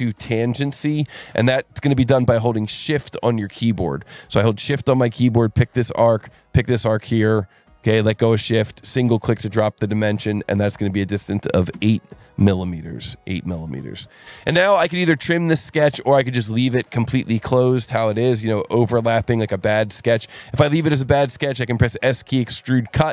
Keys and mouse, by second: 5.2 shift+click, 6.5 shift+click, 8.9 click, 11.5 KP_8, 11.7 KP_Enter, 13.6 click, 17.4 click, 20.7 click, 21.2 s, 22.0 click.